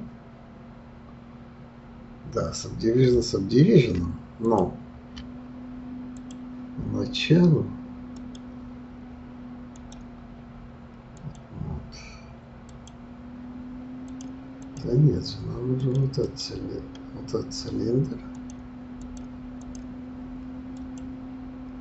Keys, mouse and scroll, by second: 4.6 ctrl+z, 4.7 ctrl+click, 6.1 click, 8.2 click, 9.7-13.1 drag, 14.3 click, 15.8 click, 16.2 click, 18.3-19.8 drag, 20.8 click.